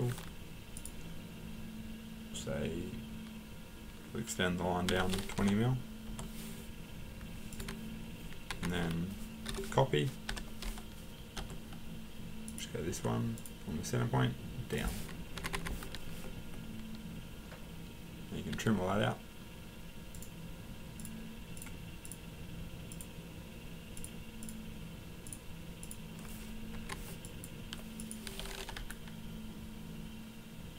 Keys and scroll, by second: 4.9-5.4 typing, 6.1 Return, 7.6 Escape, 8.5 Escape, 9.2-10.3 typing, 11.4 Return, 12.9 Return, 15.4 Escape, 15.5 Escape, 18.5 t, 21.5 t, 26.7 Escape, 28.7 Delete.